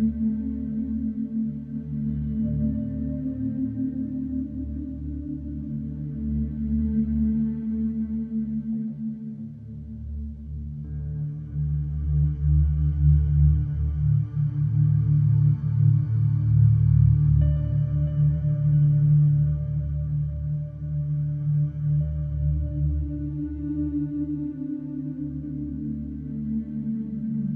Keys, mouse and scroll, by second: 0.0 Escape, 3.8 click, 6.4 click, 7.9 Escape, 12.1-13.1 shift+drag, 13.1 shift+click, 14.1 click, 15.0 typing, 15.8 Return, 18.6-20.9 drag, 20.5 typing, 20.9-22.0 Return, 21.5 typing, 22.2 Escape, 23.0 middle click, 23.2 middle click, 25.2 click, 27.3 click.